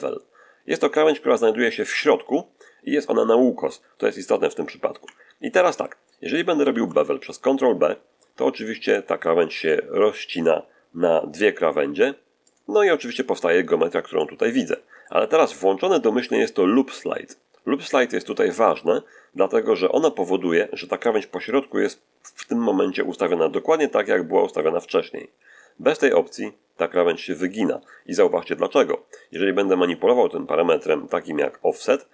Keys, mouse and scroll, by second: 6.5 ctrl+b, 12.3 click, 14.0 shift+middle click, 26.1 click, 29.2-32.1 drag.